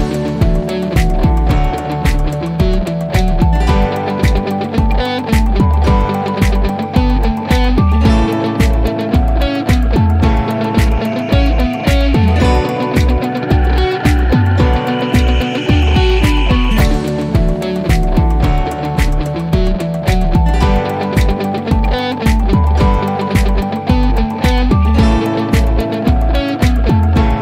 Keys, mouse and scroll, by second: 2.6-3.1 click, 3.7 typing, 5.7 typing, 6.2 click, 6.9-8.4 scroll down 1, 10.2 click, 11.6-13.1 scroll down 1, 16.2 click, 20.2 click, 23.0 click.